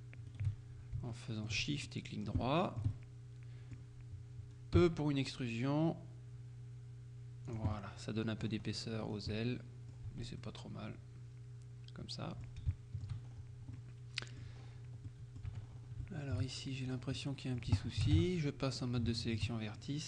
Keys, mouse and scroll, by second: 0.4 right click, 1.2 middle click, 2.5 shift+middle click, 3.0 shift+middle click, 4.8 e, 7.6 click, 8.8-9.4 scroll down 1, 9.4 click, 10.1 Tab, 12.8 shift+click, 13.3-13.8 shift+scroll up 1, 13.8 click, 14.6-15.1 scroll up 1, 15.1 click, 15.5 Tab, 15.7-16.1 scroll up 1, 16.1 shift+click, 16.6-17.3 shift+scroll up 1, 17.3 middle click, 17.9 shift+middle click, 18.2 ctrl+shift+Tab, 18.8 click, 19.2 shift+middle click, 19.6 shift+middle click.